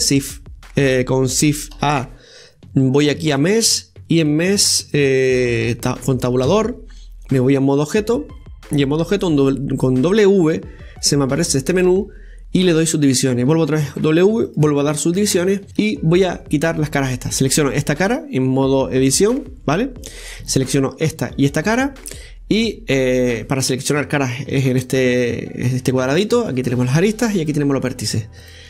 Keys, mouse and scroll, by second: 1.7 shift+a, 6.5 Tab, 9.0 w, 13.5 w, 15.2-15.7 scroll up 1, 15.7 click, 17.4 right click, 20.9 shift+right click, 21.4 shift+right click, 26.4 click, 27.4 click, 28.4 click.